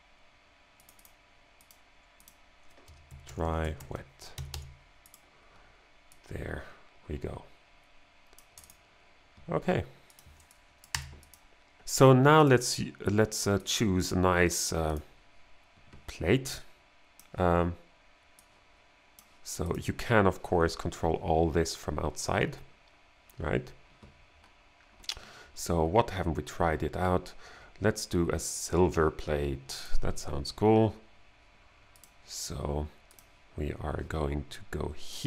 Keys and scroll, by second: 2.8-5.0 typing, 11.0 BackSpace.